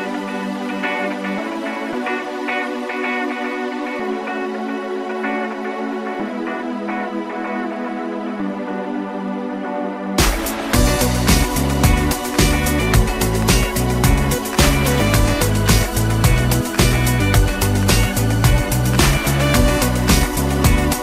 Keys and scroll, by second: 13.8 Return.